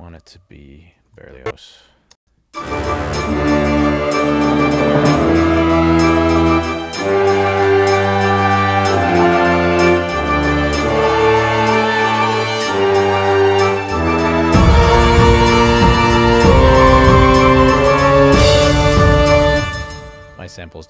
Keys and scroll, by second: 1.1 ctrl+alt+l, 2.2 space, 19.5 space.